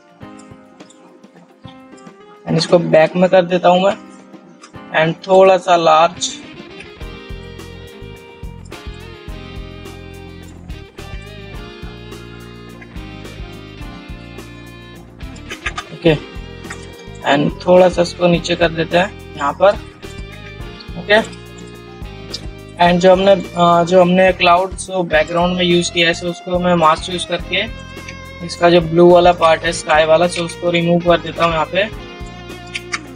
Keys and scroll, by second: 4.9 ctrl+t, 7.2 alt+shift+t, 11.1 ctrl+t, 11.3 ctrl+r, 21.1 ctrl+shift+ç.